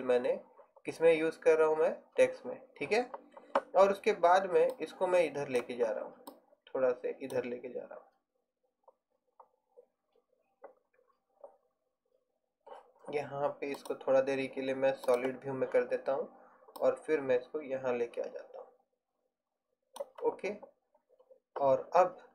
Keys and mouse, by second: 17.0-18.7 drag.